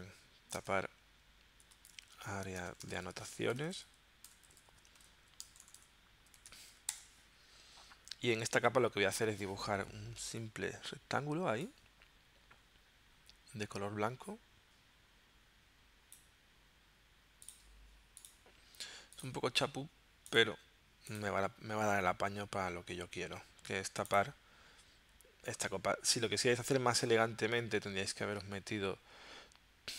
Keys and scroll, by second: 0.5-7.2 typing, 9.7 m.